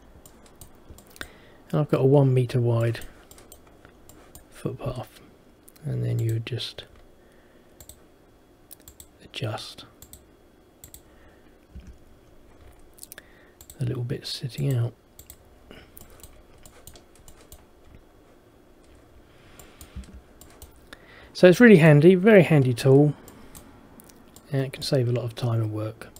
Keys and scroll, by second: 11.9 Escape, 20.1 Escape.